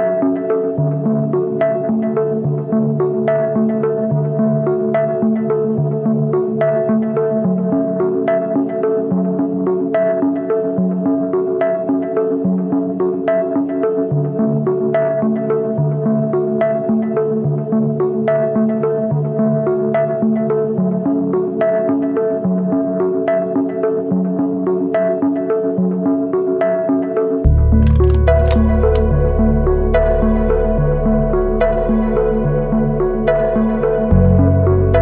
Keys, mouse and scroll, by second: 16.3-17.9 scroll up 1, 17.9-20.3 scroll down 1, 20.3-20.8 scroll up 1, 22.0-23.0 scroll down 1, 23.2 shift+click, 26.6 double click, 27.9 typing, 30.7 double click.